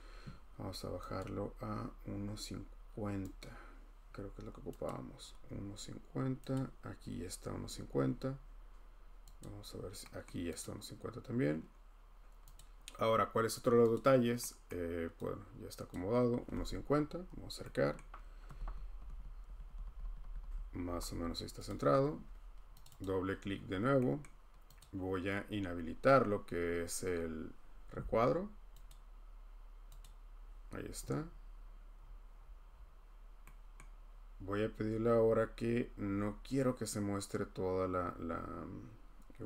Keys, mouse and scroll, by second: 1.2 click, 2.1 scroll, 3.4 click, 3.7 scroll, 4.3 scroll, 4.8 click, 7.2 click, 9.5 click, 10.2 middle click, 10.6 click, 12.5 click, 13.9 click, 14.7 middle click, 15.4 scroll, 15.9 click, 15.9-17.5 scroll, 17.9 scroll, 18.5 Down, 18.6 Down, 19.0 Down, 19.1 Down, 19.4 Left, 19.6 Left, 19.8 Left, 20.0 Left, 20.2 Left, 20.4 Left, 20.8 Right, 21.1 Right, 21.7 click, 22.0 click, 22.1 click, 22.8 click, 23.1 click, 24.2 middle click, 24.8 click, 26.7 scroll, 28.9 click, 32.0-33.5 scroll, 33.7 scroll, 34.8 scroll, 37.3-37.9 scroll.